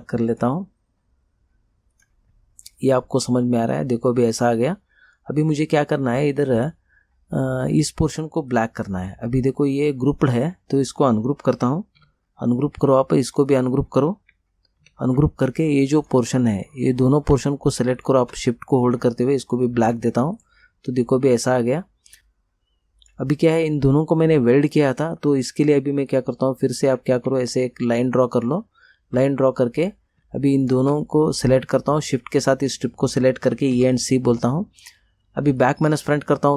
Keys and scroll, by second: 12.1 ctrl+u, 14.9 ctrl+u, 33.5 e, 33.9 c.